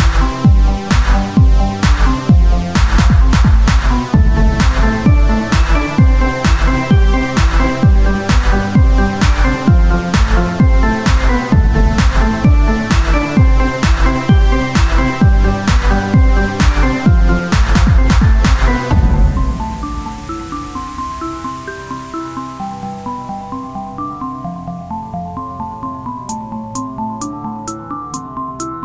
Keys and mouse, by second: 0.4 w, 2.4 ctrl+r, 4.0 click, 4.7 ctrl+Tab, 5.7-6.9 drag, 7.7 z, 8.4 r, 9.2 z, 9.8-11.3 drag, 11.3 Tab, 16.4 Tab, 16.9-18.4 drag, 18.4 Tab, 21.1 KP_1, 21.7 z, 24.2 z.